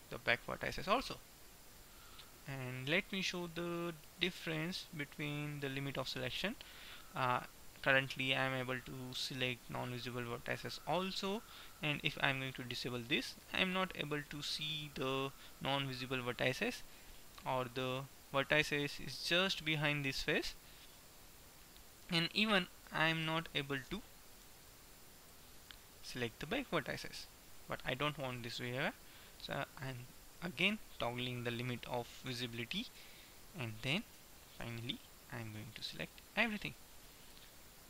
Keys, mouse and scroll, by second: 1.1-2.3 middle drag, 5.4-10.8 middle drag, 12.9-14.1 drag, 14.1-16.1 middle drag, 17.1 middle click, 22.9 KP_1, 24.1 a, 24.4 b, 25.8-27.8 middle drag, 31.8-33.4 drag, 33.1 KP_1, 34.3 a, 34.8 b, 36.3-37.4 middle drag, 37.4 KP_1.